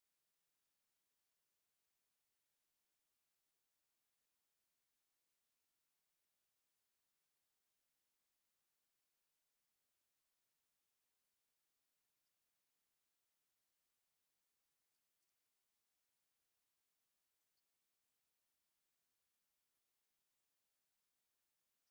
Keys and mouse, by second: 4.6 click, 5.8 click, 9.1-10.6 drag, 11.5 click, 12.4 click, 15.1 click, 17.1-20.2 drag.